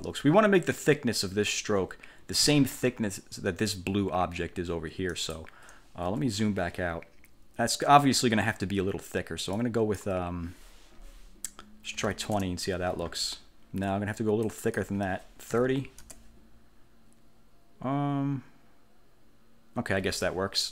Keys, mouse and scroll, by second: 5.2 click, 6.1 1, 9.7 click, 12.1 2, 12.4 0, 14.6 click, 15.4-16.4 typing.